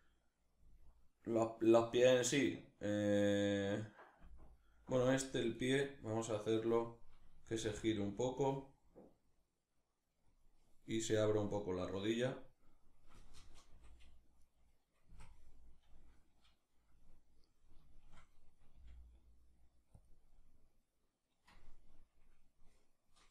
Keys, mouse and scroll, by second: 0.3 Right, 3.9 Left, 4.5 Right, 5.2-7.2 right drag, 7.2 r, 10.0 click, 13.3 Left, 14.1 right click, 14.7 Right, 16.5-19.7 middle drag, 18.4 g, 19.7 click, 19.9-23.3 middle drag.